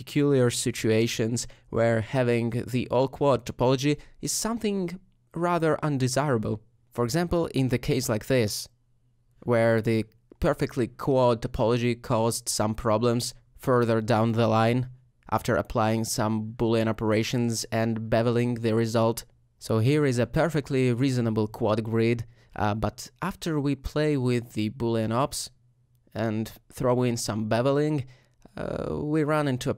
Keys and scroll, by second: 0.0-1.1 typing, 5.6-7.5 typing, 18.2 Tab, 22.8 Tab, 26.2 typing.